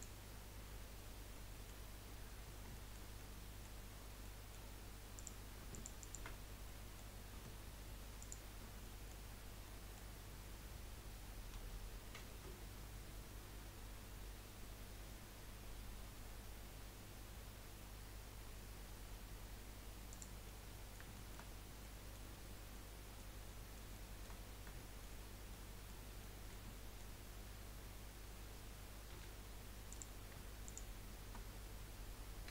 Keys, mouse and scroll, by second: 1.3 middle click, 1.8-2.7 scroll up 2, 2.7-5.1 shift+middle drag, 5.1 click, 5.7 alt+shift+click, 6.0 alt+shift+click, 6.4 scroll down 3, 6.7-8.2 middle drag, 8.2 alt+shift+click, 8.8 middle click, 9.3 scroll up 1, 9.6-12.1 middle drag, 12.1 ctrl+b, 20.4-21.5 middle drag, 21.5 scroll up 2, 21.8 middle click, 22.3 scroll up 1, 22.7-24.4 middle drag, 24.4-24.8 scroll up 1, 24.8 shift+middle click, 25.2 scroll up 1, 25.6-27.2 middle drag, 27.2 scroll up 1, 29.1 1, 29.9 click, 30.6 shift+click.